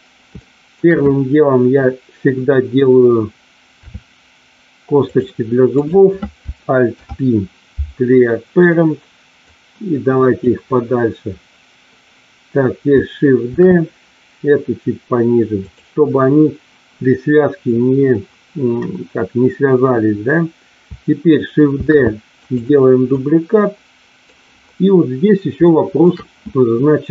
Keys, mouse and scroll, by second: 0.3 shift+middle click, 3.8 e, 4.9 click, 5.7 click, 6.9 alt+p, 9.4-10.4 drag, 13.4 shift+d, 15.6 click, 21.7 shift+d, 22.3 click, 23.2-24.2 drag, 25.7 shift+middle click.